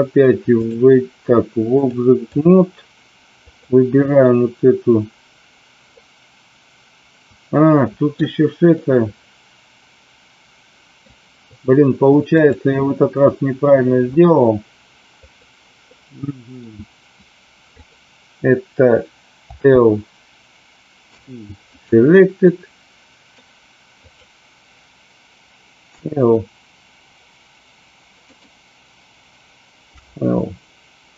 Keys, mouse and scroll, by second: 1.8 click, 3.5 click, 5.9-8.1 middle drag, 8.7-11.0 middle drag, 12.5-15.4 drag, 15.8 middle click, 17.8 click, 19.5 l, 21.0 p, 22.3 middle click, 25.8 p, 28.2 click, 29.8 l.